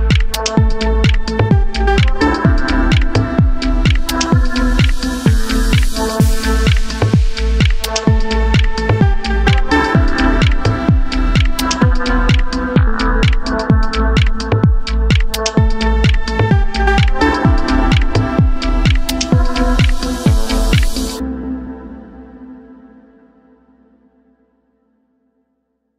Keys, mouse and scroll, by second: 0.4 s, 1.1 click, 1.6 KP_Decimal, 1.9-2.3 scroll down 1, 2.3 s, 3.1 click, 3.3 g, 4.4 click, 4.4 scroll down 1, 4.6-5.9 middle drag, 5.2 s, 5.9 click, 6.0 g, 6.7 click, 6.9 middle click, 7.3 Tab, 7.6 click, 8.0 3, 8.2 click, 8.4-8.8 scroll down 1, 9.1 g, 10.9 click, 11.1 e, 12.8 click, 13.1-14.3 middle drag, 14.3 click, 14.7 e, 15.7 click, 16.0-17.1 middle drag, 16.3 scroll down 2, 16.8-17.1 scroll up 2, 17.1 click, 17.7 g, 19.9 click, 20.0 e, 20.8 click, 21.5 scroll down 2, 21.6-24.1 middle drag, 22.0 KP_Decimal, 22.8-23.2 scroll down 2, 23.2 g, 24.3 click, 25.2 e.